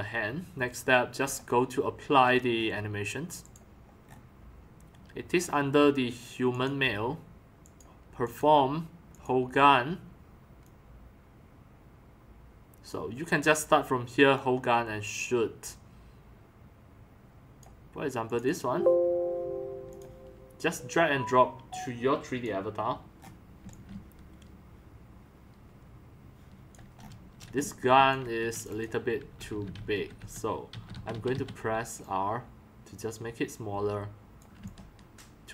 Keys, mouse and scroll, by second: 1.2 click, 2.3-2.8 scroll up 2, 4.0 scroll up 1, 6.5 click, 7.6 click, 8.3 click, 9.1 click, 10.6-12.9 drag, 14.3 click, 17.5 click, 18.3 middle click, 18.5 middle click, 19.9 middle click, 23.2 middle click, 23.6 x, 23.9 c, 26.9 right click, 27.5 x, 27.9 c, 29.0-31.1 typing, 34.6 c.